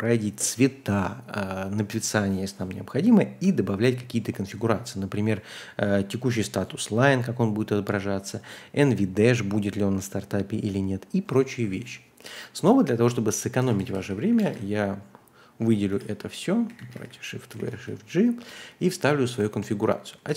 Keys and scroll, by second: 13.3-19.1 typing, 20.1-20.3 typing.